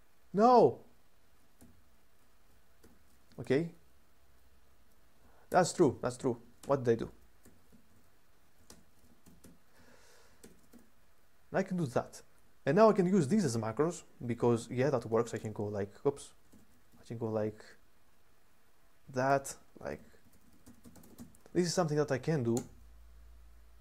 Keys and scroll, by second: 1.4-3.6 typing, 5.2-12.0 typing, 7.6 Escape, 13.2-13.9 typing, 15.1 typing, 16.3-16.7 typing, 19.0-23.8 typing.